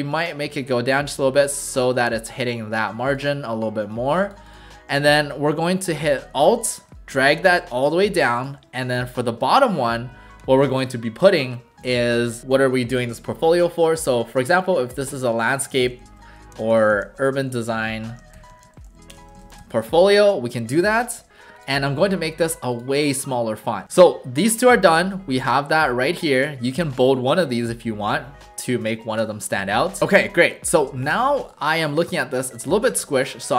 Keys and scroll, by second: 9.1 ctrl+alt+shift+a, 13.8-20.1 typing, 23.9 w.